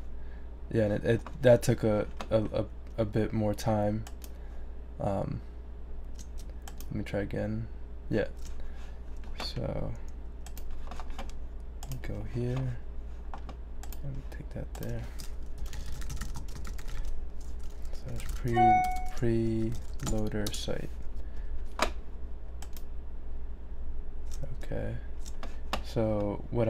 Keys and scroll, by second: 15.3-20.5 typing, 21.3 shift+Return.